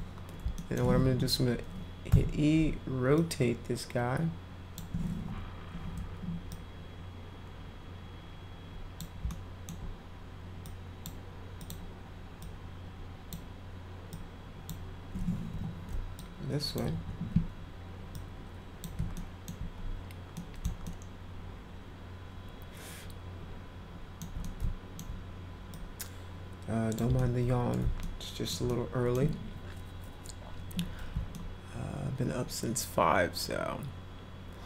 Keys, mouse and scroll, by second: 0.5 alt+middle click, 1.0 w, 2.1 e, 3.1-4.7 drag, 6.4-8.9 drag, 9.3 alt+middle click, 10.6-11.0 drag, 11.6 click, 12.4 click, 14.1 click, 15.5 e, 16.2 click, 16.9 w, 18.1 click, 19.1 alt+middle click, 20.3 middle click, 20.8-24.2 alt+middle drag, 24.4-24.9 alt+middle drag, 25.7-26.9 drag, 27.1 middle click, 28.0-28.5 alt+middle drag, 28.6 middle click, 31.3-34.6 alt+middle drag.